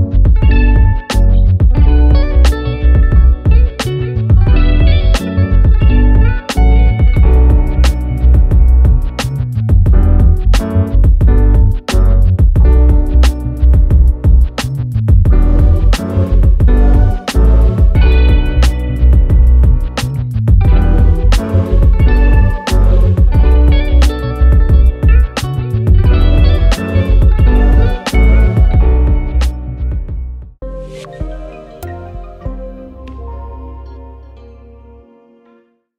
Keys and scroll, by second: 9.9 ctrl+z.